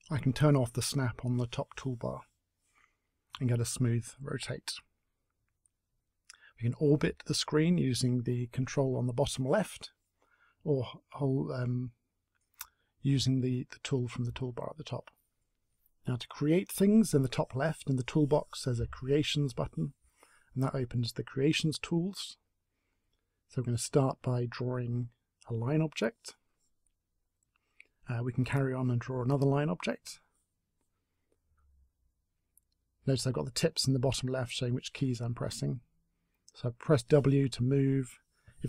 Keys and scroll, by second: 30.9 space, 35.4 w, 37.0-38.5 typing.